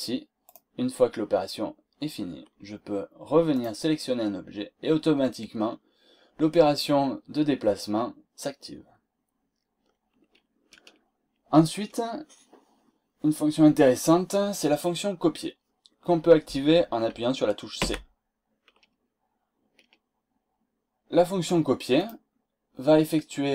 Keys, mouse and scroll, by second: 0.4 click, 3.5 click, 17.7 c, 21.9 click.